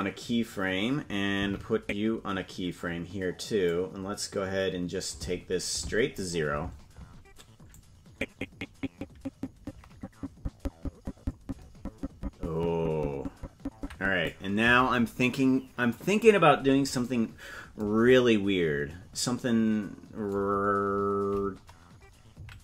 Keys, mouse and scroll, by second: 0.1 click, 2.0 Right, 4.1-6.6 drag, 8.2-14.7 drag, 18.5-19.8 scroll down 23, 21.1-21.5 scroll up 11.